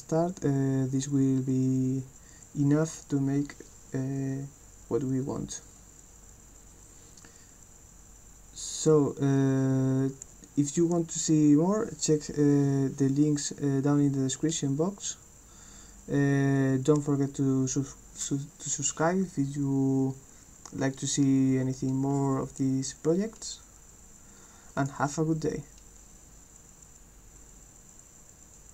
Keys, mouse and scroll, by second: 24.8 click, 28.5 click.